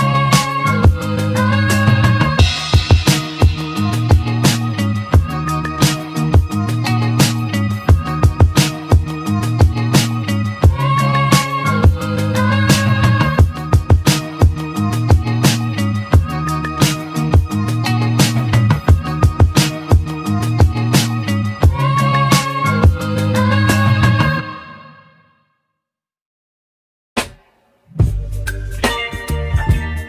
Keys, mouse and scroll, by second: 6.1-6.4 scroll up 2, 7.3 click, 8.6 click, 9.8 Tab, 10.7-11.0 scroll down 1, 11.0-11.5 scroll up 3, 12.6-13.0 scroll up 4, 13.6 ctrl+r, 19.8 middle click, 20.3-23.2 scroll down 5, 24.3 3, 24.6 click, 25.9 click, 26.4-27.2 scroll up 4, 27.2-28.1 scroll down 1, 28.1 ctrl+r.